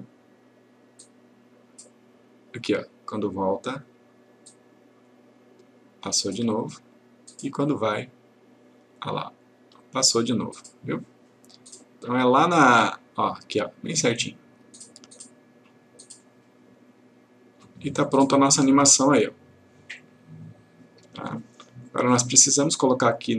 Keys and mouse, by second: 20.1-21.3 click.